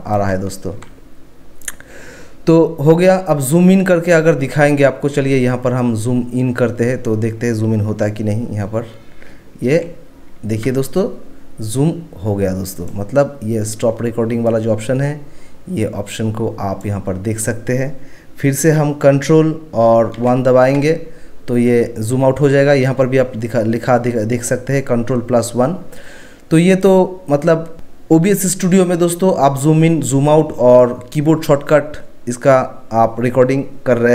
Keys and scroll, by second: 0.0-0.8 typing, 9.7 ctrl+1, 9.8 ctrl+1, 20.2 ctrl+1.